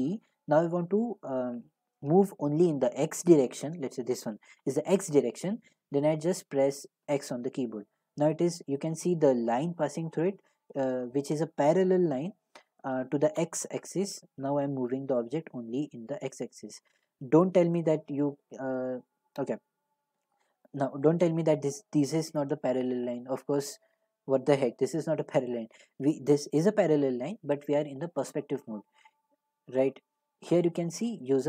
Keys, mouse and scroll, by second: 7.0 x, 17.2-22.3 drag, 18.4 x, 20.1 g, 20.8 x, 29.9-31.4 right drag.